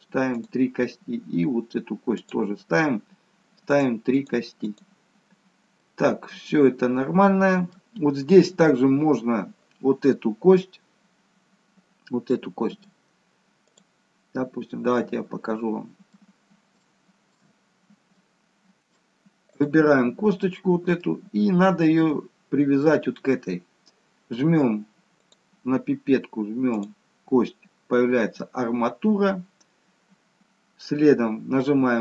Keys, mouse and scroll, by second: 0.4 click, 2.2 click, 4.2 click, 4.7 click, 5.9 middle click, 12.3 middle click, 13.7 click, 14.6-15.9 scroll up 2, 14.9 middle click, 16.3-16.8 scroll down 2, 16.8 shift+middle click, 17.6-19.3 scroll up 2, 18.1 middle click, 19.5 click, 20.4 middle click, 25.2 click.